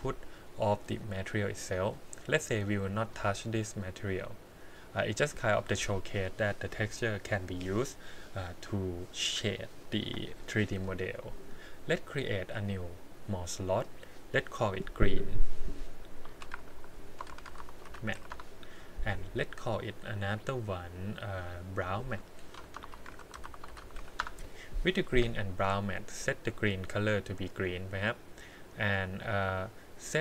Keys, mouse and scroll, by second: 0.0 click, 0.8 click, 1.5 click, 2.4 click, 12.6 click, 13.8 click, 14.5-18.3 drag, 16.7 r, 17.4 e, 20.2 click, 21.3 click, 21.8-24.2 drag, 25.8 click, 26.2 click, 27.3 click.